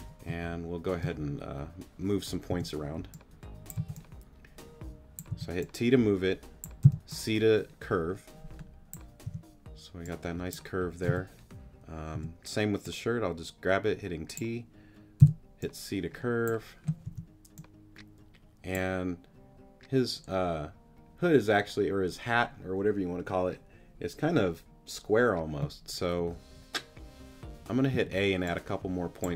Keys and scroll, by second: 0.3 space, 2.5 t, 3.8 c, 5.3 t, 6.8 c, 9.2 t, 11.1 c, 12.1 t, 15.2 c, 17.1 t, 27.9 a.